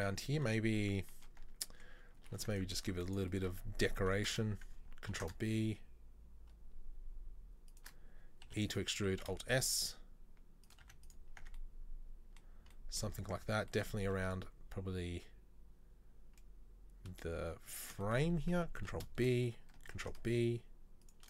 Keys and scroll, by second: 1.6 Tab, 2.4 ctrl+r, 4.0 ctrl+v, 5.2 ctrl+b, 8.6 e, 9.3 alt+s, 10.9 z, 11.5 Tab, 13.3 Tab, 14.1 ctrl+r, 18.9 ctrl+v, 20.1 ctrl+b.